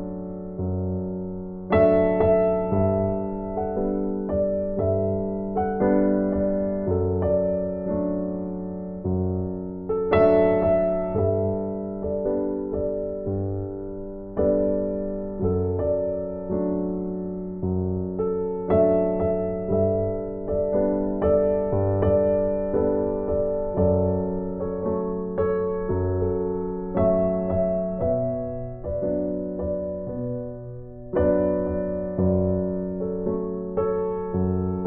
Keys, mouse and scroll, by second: 0.5 click, 3.2 right click, 5.0 click, 7.3 right click, 8.4 click, 9.9 right click, 11.2 click, 21.2 right click, 22.4 click, 25.2 right click, 26.4 click.